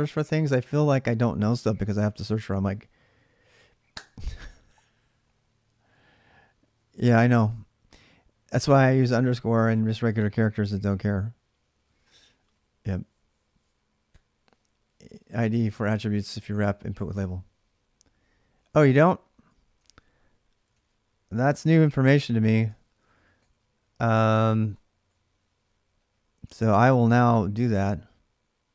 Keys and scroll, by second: 19.6 alt+Tab, 20.5 alt+Tab, 21.5 ctrl+a, 21.6 ctrl+a, 22.3-23.2 typing, 24.3-27.5 typing.